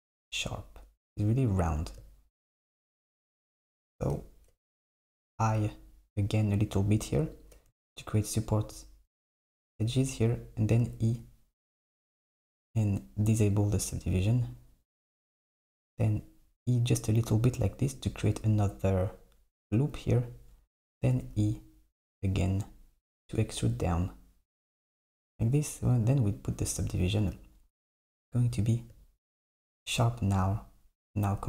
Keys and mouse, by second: 1.6 Tab, 3.0 z, 3.5 z, 3.8 z, 5.3 i, 10.9 e, 13.5 click, 15.2 g, 21.2 e, 25.9 click, 27.0 Tab.